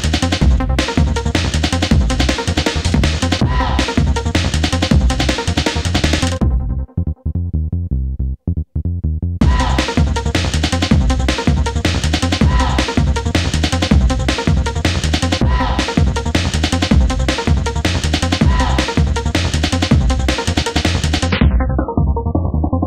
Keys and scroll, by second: 8.7 Delete, 9.7 3, 10.7 ctrl+F1.